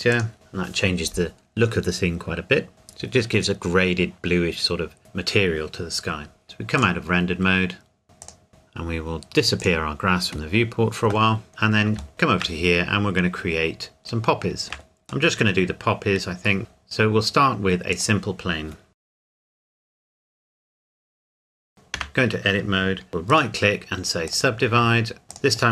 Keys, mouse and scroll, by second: 0.3 click, 6.8 click, 9.6 click, 12.0 scroll down 1, 12.1 shift+middle click, 12.6-14.0 scroll down 1, 14.0 shift+middle click, 16.1-16.6 scroll down 1, 16.6 shift+a, 17.9 click, 19.0 KP_Decimal, 19.3 KP_4, 19.8 KP_7, 21.2 scroll down 1, 21.5 Tab, 23.3 right click, 24.3 click.